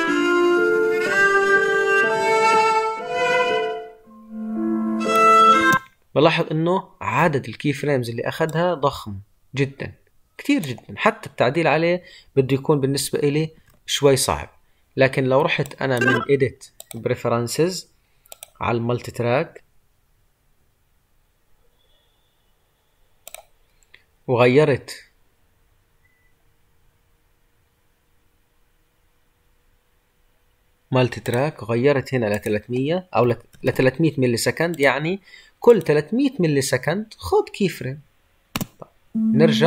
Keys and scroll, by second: 13.5 ctrl+z.